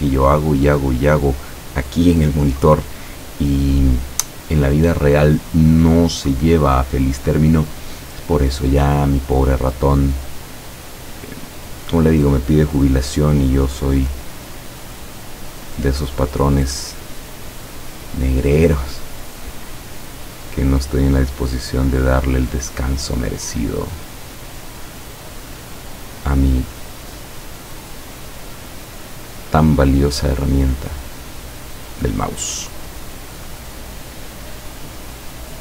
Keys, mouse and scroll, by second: 8.9 click, 12.3 click, 13.7 click, 15.6 click, 20.6 click, 24.2 click, 25.4 click, 29.0 click, 30.7 click, 31.7 click, 33.2 click, 33.8 click, 35.5 click.